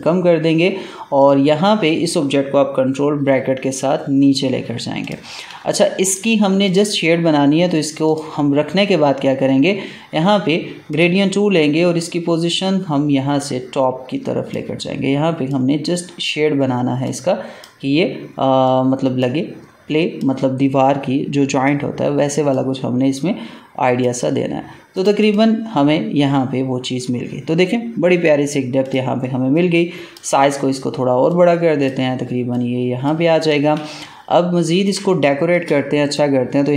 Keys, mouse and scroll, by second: 3.1 ctrl+[, 4.9 click, 5.5 space, 6.0 click, 10.8 click, 13.3-24.8 drag, 28.8 click, 29.4-33.3 drag, 33.6 ctrl+space, 33.9 ctrl+click, 34.2 ctrl+space, 35.0 space, 35.1 click, 35.4 space, 36.0 click.